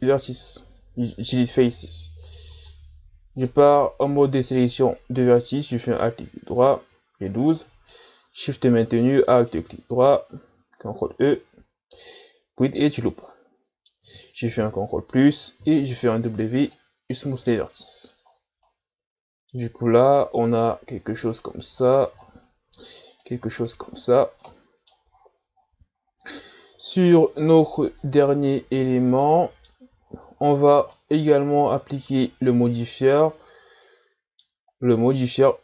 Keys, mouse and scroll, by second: 2.5 ctrl+Tab, 5.3 alt+right click, 7.6-9.4 middle drag, 9.4 alt+shift+right click, 10.8 ctrl+e, 13.2-14.6 middle drag, 14.6 ctrl+KP_Add, 15.6 w, 17.4 Tab, 17.8-18.6 scroll down 6, 18.6-19.9 middle drag, 19.9-20.2 scroll up 2, 20.2-21.4 middle drag, 21.4 scroll down 3, 21.8-23.1 ctrl+scroll up 10, 23.1 right click, 23.5-24.5 shift+scroll up 10, 24.5-25.1 middle drag, 25.1-26.8 ctrl+scroll up 21, 26.8-27.2 ctrl+scroll down 6, 27.2-27.6 scroll up 7, 27.6 right click, 28.4-29.2 scroll down 19, 29.2-30.0 middle drag, 30.0-30.9 shift+scroll up 9, 30.9-35.6 middle drag.